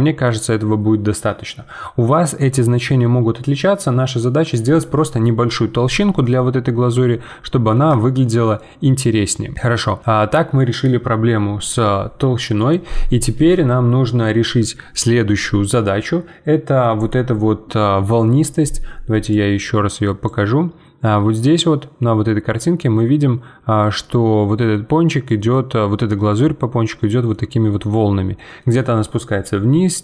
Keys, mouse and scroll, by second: 6.3-9.6 middle drag, 9.6 scroll up 1, 9.8-12.7 middle drag.